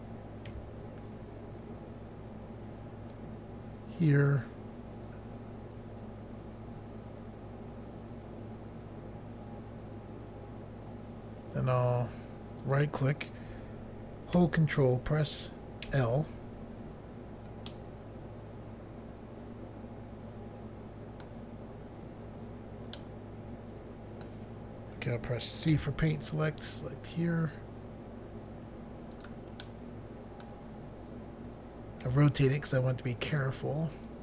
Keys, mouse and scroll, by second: 0.5 c, 3.1 click, 12.6 right click, 15.9 ctrl+l, 17.7 middle click, 23.0 middle click, 25.8 c, 26.7 click, 29.2 right click, 29.7 middle click, 32.1 c, 34.0 click.